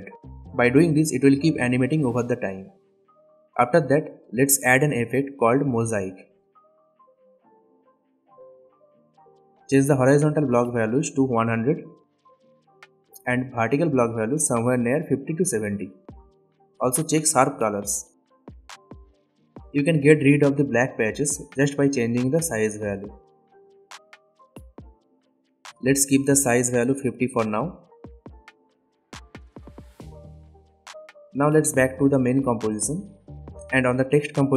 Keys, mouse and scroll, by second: 1.5-3.7 drag, 4.6 click, 5.2-6.4 typing, 6.4 click, 12.7 Return, 13.8 click, 15.4 Return, 17.6-20.4 drag, 26.7 Return, 28.1-29.2 drag.